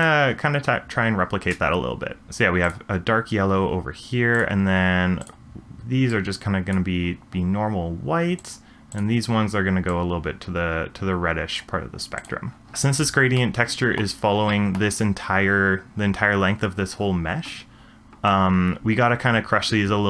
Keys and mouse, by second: 2.6 click, 4.3 click, 5.2 click, 13.4-14.0 middle drag, 14.5-14.8 shift+middle drag.